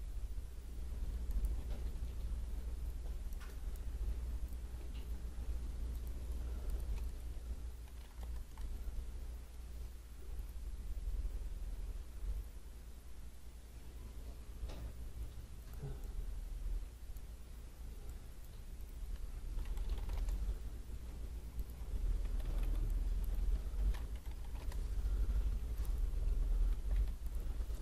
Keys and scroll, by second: 8.2 Return, 20.1 Return, 22.3 Escape, 24.6 Return, 26.9 Escape.